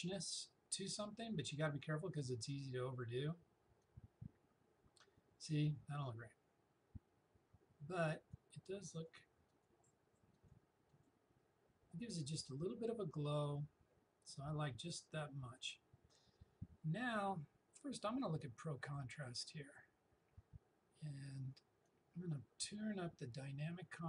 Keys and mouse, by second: 15.6 click, 18.3 click, 21.9-24.0 drag.